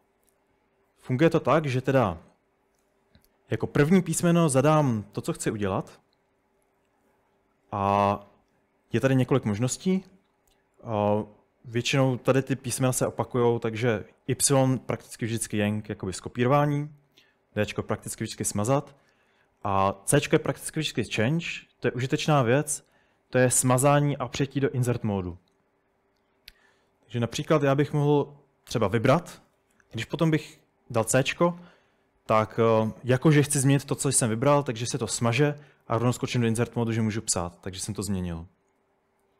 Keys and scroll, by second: 27.0-29.4 typing, 31.4 typing, 35.9-37.8 typing, 37.8 Escape.